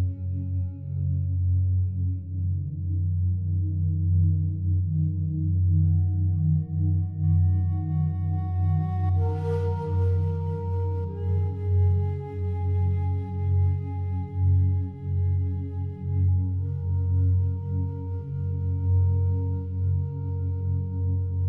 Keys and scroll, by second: 14.2 ctrl+z.